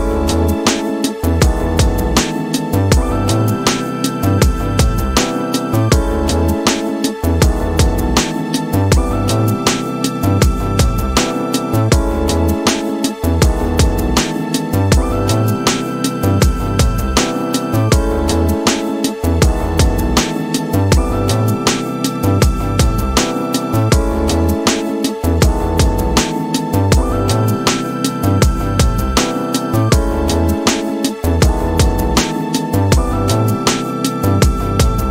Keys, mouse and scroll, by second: 1.2-12.4 drag, 12.9-13.2 scroll down 5, 13.2 middle click, 15.7-17.0 drag, 17.4-18.5 scroll down 5, 18.4-20.8 middle drag, 21.0 scroll up 2, 23.2 shift+Left, 24.6-25.4 scroll down 4, 26.5 middle click, 27.0-27.4 scroll up 3, 27.4 middle click, 28.3 space.